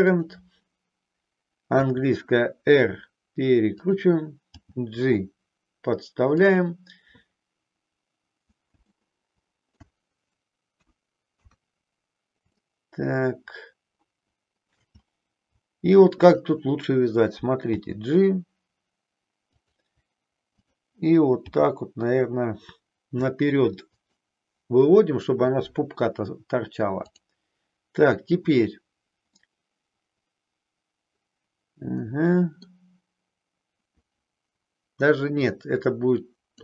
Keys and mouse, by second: 1.8 r, 4.6 g, 6.4 click, 8.9 alt+middle click, 10.7 KP_1, 12.6-14.8 shift+middle drag, 16.0 click, 17.8 g, 19.6 click, 21.4 g, 24.0 click, 27.0 click, 29.4-32.7 middle drag, 35.4-36.6 drag.